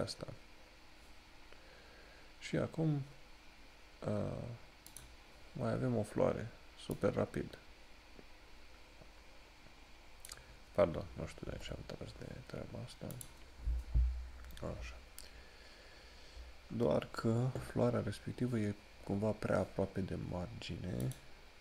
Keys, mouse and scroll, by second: 15.0 scroll down 1, 16.9 scroll up 1, 21.2 click.